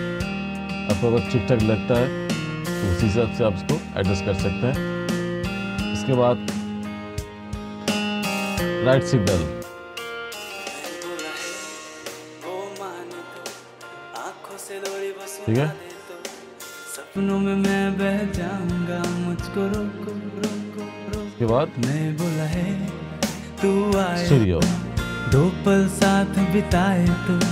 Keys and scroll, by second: 5.0-8.1 typing.